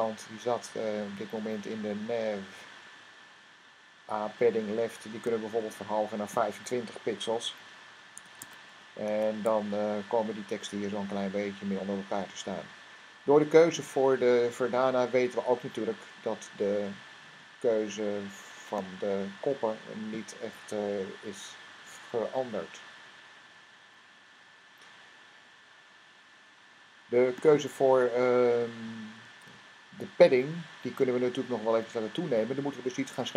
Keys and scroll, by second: 7.0 5, 7.9 s, 8.2 Tab, 8.9 super+r, 29.0 Tab, 32.8 Tab.